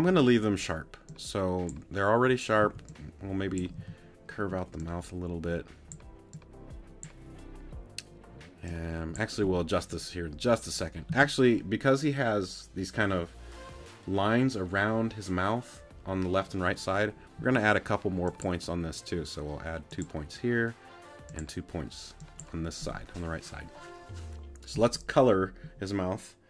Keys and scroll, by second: 2.6 c, 3.8 t, 11.1 a, 17.4 a.